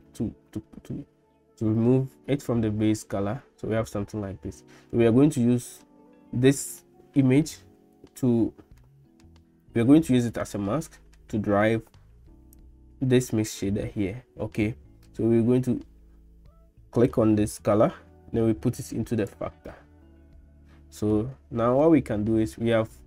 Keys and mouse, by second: 5.5 middle click, 9.0 middle click, 10.6 middle click, 12.6 click, 17.1-19.3 drag, 21.1 middle click.